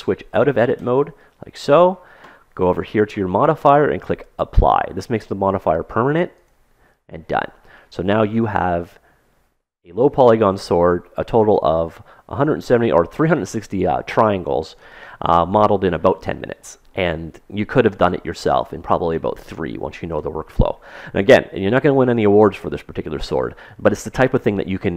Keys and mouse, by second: 0.5 Tab, 6.0-7.9 drag, 7.3-10.0 middle drag, 14.8-20.3 middle drag, 22.4 Tab, 23.2-24.9 middle drag.